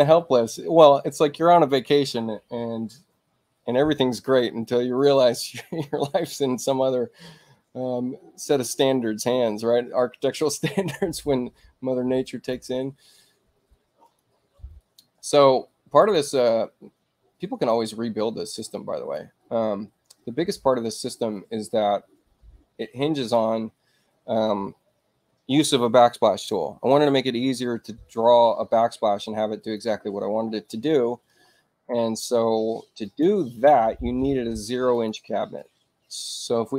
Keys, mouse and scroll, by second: 12.2 click, 14.0 click, 14.8-16.0 drag, 16.1 click, 17.7-19.1 drag, 21.3-23.3 drag, 29.6 click, 33.0 click, 34.9 click.